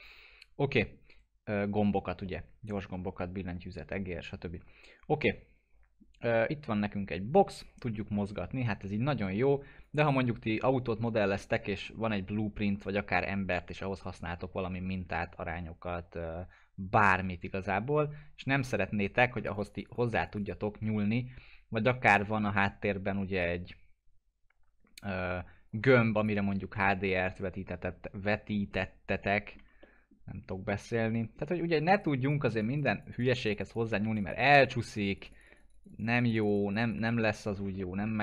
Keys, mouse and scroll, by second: 2.2-4.7 alt+middle drag, 7.1-9.9 drag, 10.1-11.9 alt+middle drag, 11.9-13.9 scroll down 1, 17.6 alt+Num_Lock, 17.6 scroll down 1, 17.8-19.3 alt+middle drag, 19.5-22.6 drag, 23.3-25.6 drag, 25.7-26.3 click, 26.9 middle click, 27.3-27.7 scroll up 1, 28.3 middle click, 28.8-29.7 alt+middle click, 30.2 scroll down 1, 30.5-31.4 alt+middle drag, 31.9 right click, 32.2 click, 37.1-37.5 scroll down 1, 37.8 alt+middle click.